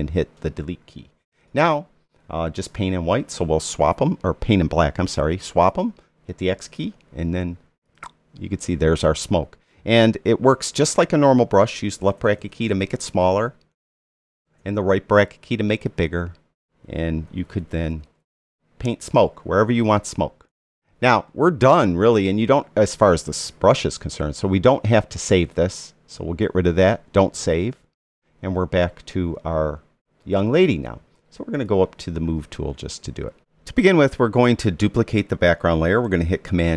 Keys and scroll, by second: 5.1 x, 11.7 [, 17.3 ].